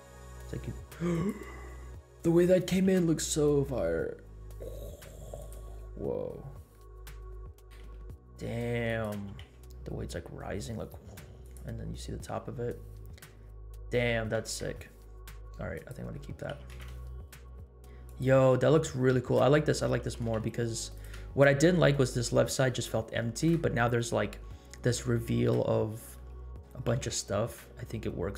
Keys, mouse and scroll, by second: 2.7 g, 6.7 middle click, 7.5 g, 9.2 g, 14.3 r, 16.2 middle click, 16.5 g, 20.0 g, 22.4 scroll down 1, 23.2 shift+middle click, 24.6 scroll up 1, 26.2 middle click, 26.9 g.